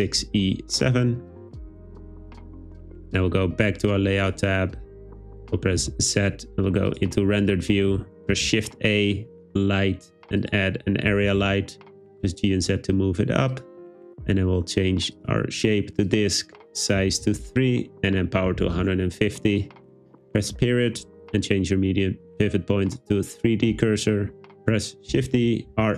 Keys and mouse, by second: 5.8 z, 8.4 shift+a, 11.3 g, 11.4 z, 12.4 click, 15.3-16.2 drag, 16.6-18.9 drag, 24.7 shift+x, 25.2 shift+d, 25.7 r.